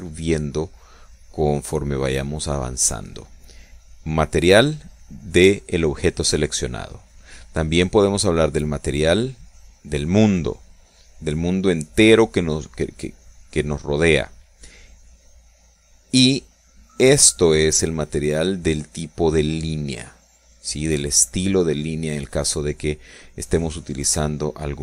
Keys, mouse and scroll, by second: 4.7 click, 5.9 click, 10.3 click.